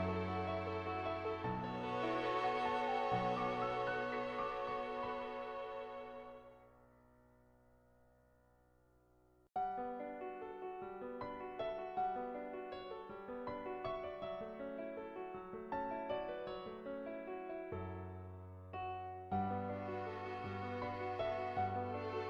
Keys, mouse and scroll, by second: 0.3 click, 1.4 click, 2.0 click, 3.2 click, 3.8 click, 4.8 click, 5.1 click, 5.5 click, 6.0 click, 6.9 click, 7.4 click, 7.7 click, 8.0 click, 12.6 click, 13.3 click, 13.9 ctrl+z, 14.1 ctrl+z, 17.4 click, 18.0 ctrl+z, 18.4 click, 19.1 click, 19.5 click, 20.3 click, 20.8 click.